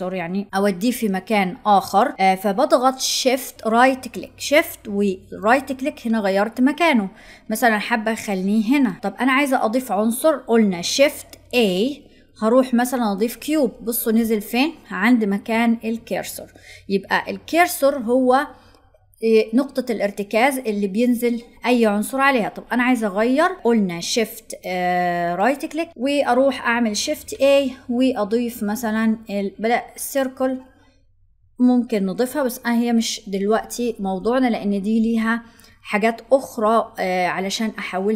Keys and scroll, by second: 10.8 shift+a, 26.9 shift+a.